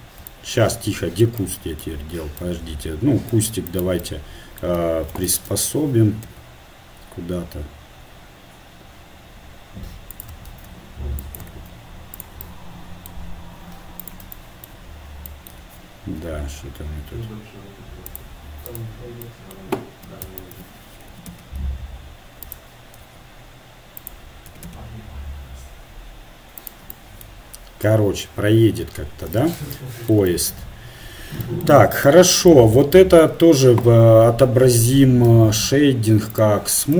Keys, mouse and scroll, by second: 2.3 click, 3.2-5.3 right drag, 5.3 shift+Tab, 6.3 g, 10.5 shift+d, 11.5 shift+d, 13.0-14.1 middle drag, 14.1-16.0 right drag, 16.0 g, 18.9-20.4 right drag, 20.4 shift+Tab, 21.1 r, 23.1 g, 26.2 r, 32.0-33.9 drag, 33.9 Tab, 34.6 Tab, 36.5-36.9 drag, 36.5 t.